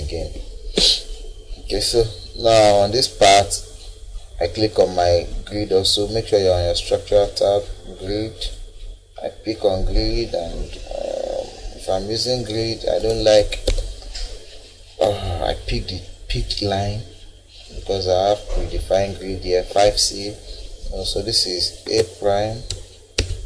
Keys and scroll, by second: 0.2 Delete, 12.8 Escape, 21.8 a, 22.7 '.